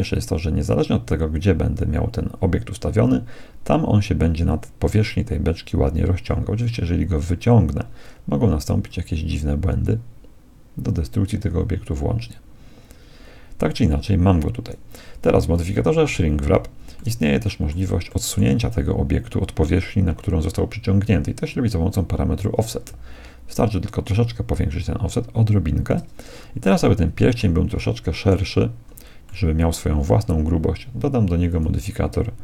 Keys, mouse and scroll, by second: 0.1-1.7 drag, 16.4 z, 17.0-19.8 middle drag, 22.6-24.4 drag, 26.8-31.0 middle drag, 31.5-32.4 drag.